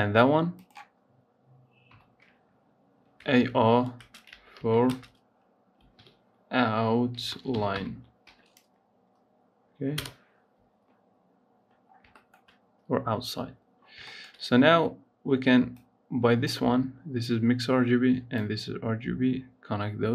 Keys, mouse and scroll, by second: 0.3 click, 1.7 F2, 11.8 scroll down 3, 12.0 shift+middle click, 12.9 scroll up 1, 13.2-13.6 scroll down 1, 13.6 scroll up 2, 13.9-15.5 shift+middle drag, 15.5-20.1 drag.